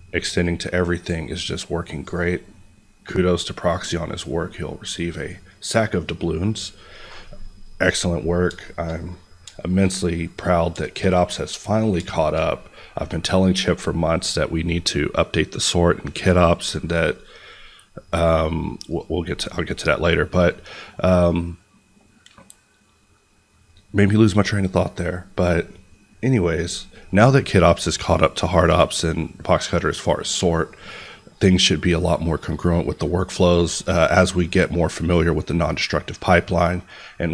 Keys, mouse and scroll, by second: 2.8-3.6 scroll down 1, 3.6 click, 4.2 scroll, 5.1 click, 7.6 scroll down 1, 8.1 middle click, 8.3 scroll, 8.6 shift+middle click, 9.4 shift+middle click, 11.7 scroll down 1, 12.1 middle click, 18.8 click.